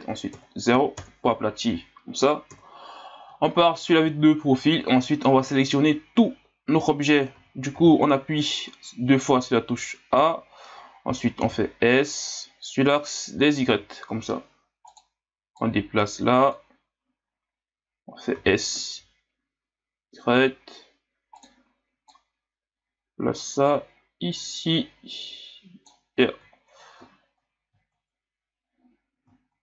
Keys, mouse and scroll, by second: 2.5 KP_3, 3.6-4.1 scroll down 2, 4.3-5.8 scroll down 2, 5.8-6.2 scroll down 1, 6.8-7.3 scroll up 1, 7.3 a, 7.7 a, 8.4 scroll down 2, 11.4 s, 15.6-18.4 drag, 18.4 s, 22.1-25.1 drag, 26.6-27.2 scroll down 3, 27.2-29.4 scroll up 1, 29.4-29.6 scroll up 1.